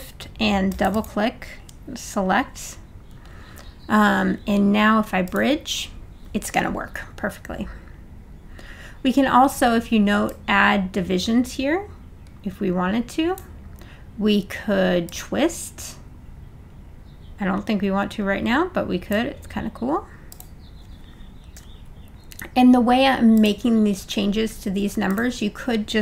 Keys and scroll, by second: 21.6 0.